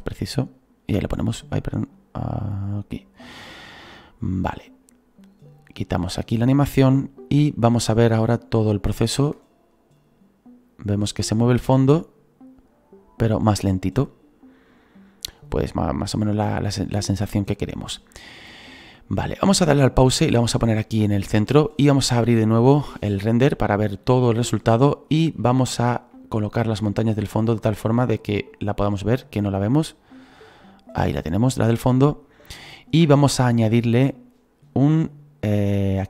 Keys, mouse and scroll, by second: 1.0-4.2 drag, 3.9-4.8 scroll down 9, 4.8-8.8 drag, 4.8 scroll down 2, 6.6 scroll down 2, 6.9-8.7 shift+middle drag, 9.2 space, 11.1 scroll up 1, 12.8 scroll up 2, 19.6 click, 20.4-28.5 drag, 28.5 right click, 29.4-36.0 drag, 32.2 scroll up 4.